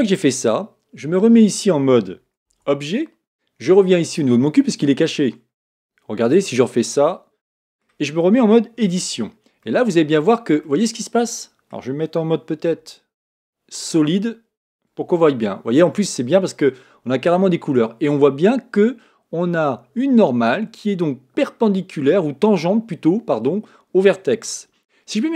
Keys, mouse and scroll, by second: 2.6 Tab, 4.0 click, 6.7 click, 7.5-8.9 middle drag, 8.9 Tab, 9.6-12.7 middle drag, 12.7 z, 15.1 shift+middle click, 15.9-16.5 scroll up 2, 16.5 scroll down 2, 17.5-20.5 middle drag.